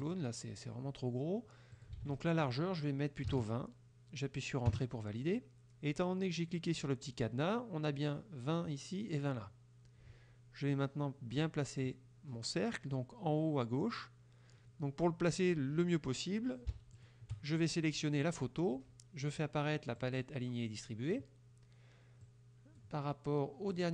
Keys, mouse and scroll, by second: 0.1 click, 1.8 ctrl+click, 2.0 ctrl+a, 3.3 KP_2, 4.8 KP_Enter, 10.8-12.0 drag, 17.0 shift+click, 20.0 click, 22.3 click, 23.8-23.9 drag.